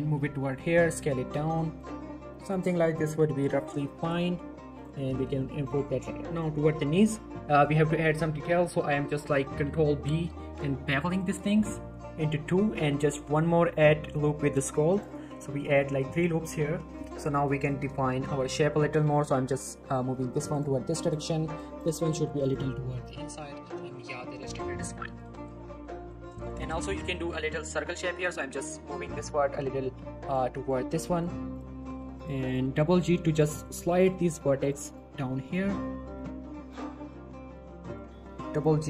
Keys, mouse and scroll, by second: 0.0 y, 0.8 s, 1.8 click, 1.9 g, 2.5 click, 3.6 scroll up 1, 3.9 g, 4.8 click, 4.9 scroll down 1, 5.1 z, 5.4 shift+middle click, 5.6 z, 6.3 click, 6.6 z, 7.0 z, 7.3 middle click, 7.9-8.5 scroll up 1, 9.6 z, 10.0-10.3 scroll down 1, 10.9 ctrl+b, 13.3-14.8 scroll up 1, 14.9 click, 15.0 right click, 15.3 z, 15.6 middle click, 17.1 z, 17.3-17.8 scroll up 2, 17.5 shift+middle click, 17.8 scroll down 1, 18.0 shift+middle click, 18.6-19.4 click, 19.4 g, 20.5 click, 21.9 g, 22.4 click, 23.0 shift+middle click, 23.5 z, 23.6 Tab, 23.9 middle click, 24.2 z, 24.4 middle click, 24.7-26.4 scroll up 4, 24.8 Tab, 25.0 middle click, 25.3-26.1 shift+middle click, 26.4 click, 26.6 scroll up 1, 26.8 middle click, 27.1 scroll down 1, 27.1 middle click, 27.6 scroll up 1, 27.7 middle click, 28.2 g, 28.3 g, 29.1 click, 29.6 g, 29.7 g, 30.3 click, 30.5 middle click, 31.0 scroll down 1, 31.0 middle click, 31.5 click, 31.7 g, 31.8 g, 32.1 click, 32.8 g, 32.9 g, 33.3 click, 33.5 middle click, 34.0 click, 34.1 g, 34.3 g, 34.6 click, 35.0 g, 35.2 g, 35.4 click, 35.7 middle click, 36.1 click, 36.3 g, 36.4 g, 36.7 click, 36.9 middle click, 37.5-37.9 scroll up 1, 37.9 click, 38.0-38.8 typing, 38.5 click.